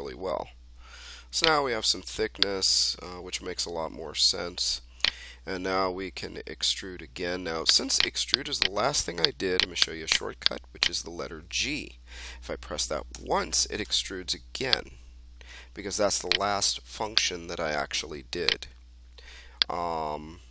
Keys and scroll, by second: 13.1 g.